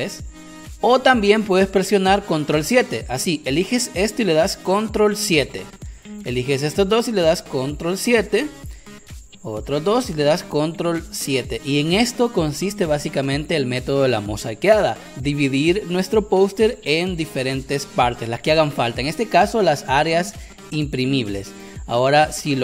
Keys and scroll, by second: 20.2 Caps_Lock.